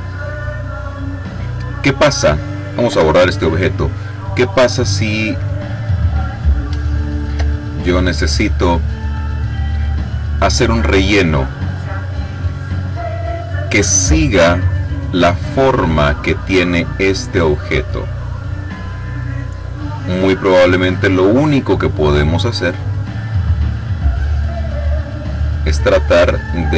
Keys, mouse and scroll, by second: 0.5 click, 2.7 Delete, 5.2 click, 5.9 click, 6.8 ctrl+click, 8.1 click, 9.2 click, 12.1 click, 15.2 click, 16.3 click, 18.9 click, 21.0 click, 22.3-26.7 drag.